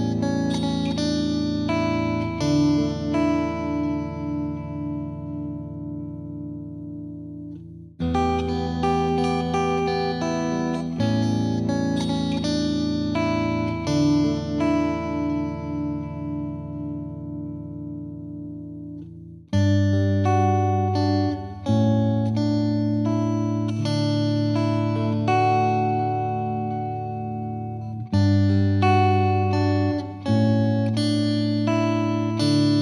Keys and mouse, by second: 0.2 click, 0.2 click, 0.7 click, 1.1 click, 3.5 click, 5.2 click, 5.4 shift+click, 5.7 shift+click, 6.0 click, 6.4 click, 6.8 Escape, 6.9 click, 7.3 Page_Up, 7.7 F3, 7.7 F3, 8.0 click, 8.7 F3, 8.8 F2, 9.0 click, 13.2 click, 14.6 click, 15.1 click, 15.5 click, 15.5 click, 16.2 click, 16.3 click, 16.9 click, 17.2 click, 17.8 click, 17.9 click, 18.3 click, 19.0 click, 19.1 click, 19.4 click, 19.8 click, 20.4 click, 20.5 click, 21.0 click, 21.0 click, 21.4 click, 21.5 click, 22.7 click, 22.8 click, 23.2 click, 23.2 click, 24.3 click, 24.4 click, 25.0 click, 26.7 click, 27.2 click, 27.8 click, 31.3 click, 31.6 click.